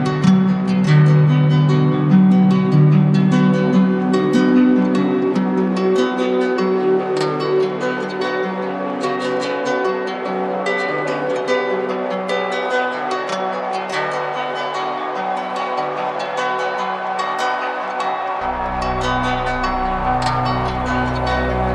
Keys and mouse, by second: 5.7-6.8 drag, 14.1-15.2 drag, 21.3-21.7 drag.